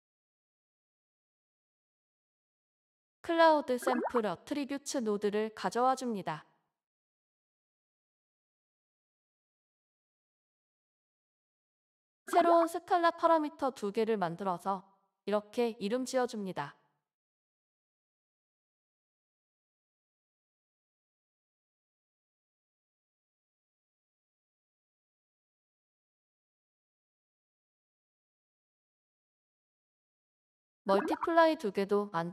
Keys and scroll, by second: 3.2-5.6 typing, 12.2 s, 13.2 s, 15.9-20.2 typing, 22.4-25.7 typing, 28.7-29.7 typing.